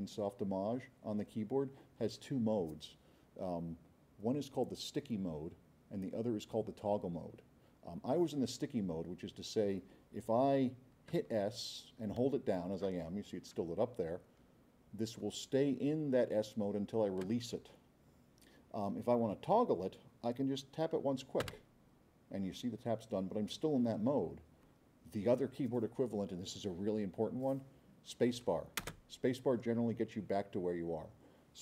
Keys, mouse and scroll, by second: 14.4 scroll up 2, 15.1 scroll up 2, 15.4-16.0 scroll down 6, 28.8 space.